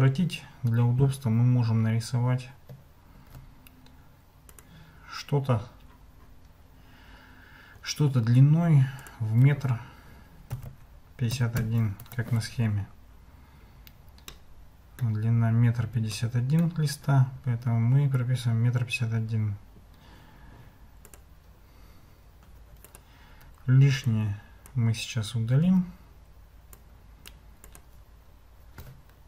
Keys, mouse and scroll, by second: 3.2 shift+a, 9.0-12.6 drag, 14.4 middle click, 16.3 middle click, 21.2-23.1 drag, 23.3 Tab, 24.2 click, 25.6 x.